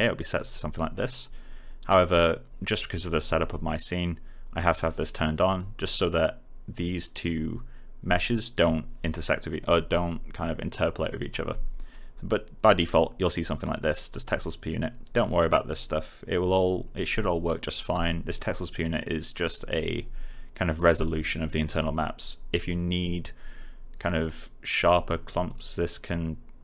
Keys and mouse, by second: 4.6 click, 12.8 click, 18.3 click, 22.5 click, 25.4 click.